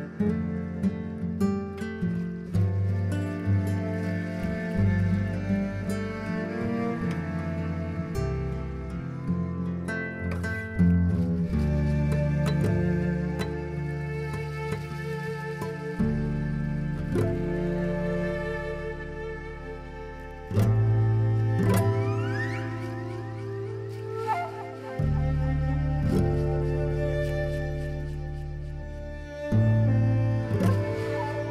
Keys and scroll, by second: 9.6 z, 11.1 b, 27.9 z.